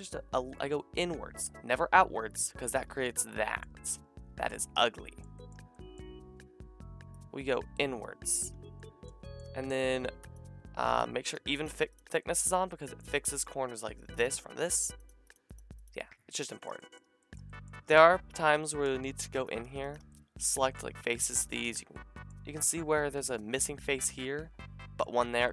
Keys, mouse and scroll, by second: 3.7-9.5 drag, 10.3 middle click, 11.0 middle click, 11.3 middle click, 11.6 middle click, 11.9-14.1 shift+middle drag, 14.1 click, 14.2 middle click, 14.7 click, 14.8 middle click, 15.0 click, 15.1 middle click, 15.2 click, 15.3 middle click, 15.5 click, 16.4 shift+middle drag, 16.6-17.1 drag, 17.1 shift+middle drag, 17.3-18.4 drag, 18.0 Tab, 19.3 click, 21.1 shift+click, 22.5 shift+middle click, 22.7-25.4 drag, 25.4 shift+middle click.